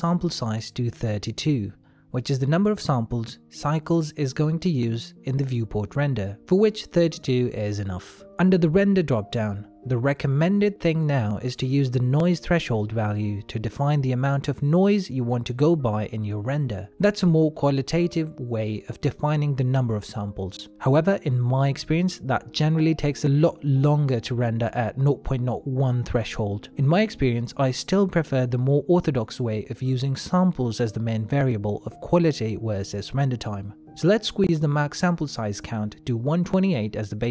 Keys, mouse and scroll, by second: 0.0 click, 6.1 middle click, 12.9 middle click, 17.9 click, 32.8 click.